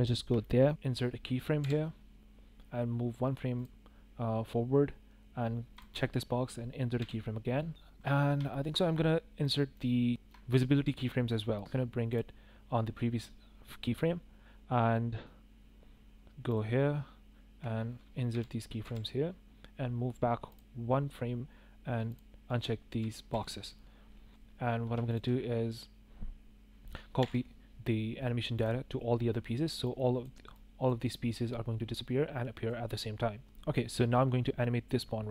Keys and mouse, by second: 0.4 shift+click, 1.6 i, 5.7 click, 7.0 i, 8.5 shift+click, 9.4-9.7 drag, 10.2 shift+click, 12.1-14.0 drag, 18.3 i, 18.8 i, 20.4 click, 22.1 click, 22.9 i, 23.3 i, 27.1 ctrl+l, 30.6 drag, 31.0-32.6 drag.